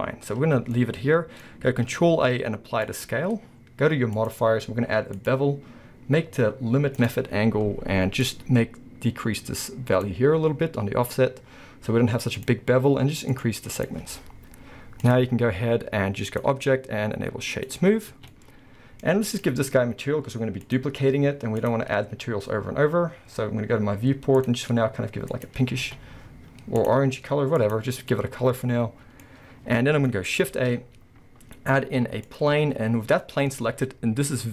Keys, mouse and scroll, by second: 2.1 ctrl+a, 4.2-7.1 drag, 8.2-13.9 drag, 14.1-15.0 scroll up 1, 15.0 click, 16.3-18.3 drag, 17.9 scroll down 1, 18.2 alt+a, 18.3-19.3 middle drag, 19.1 scroll up 1, 19.3 click, 20.6 click, 21.6 click, 23.1-24.4 scroll down 1, 24.4 click, 25.7 scroll down 1, 25.9 a, 26.8 click, 28.0 scroll down 1, 28.1-34.5 middle drag, 29.3-29.9 scroll up 1, 29.9 scroll down 1, 30.5 shift+a.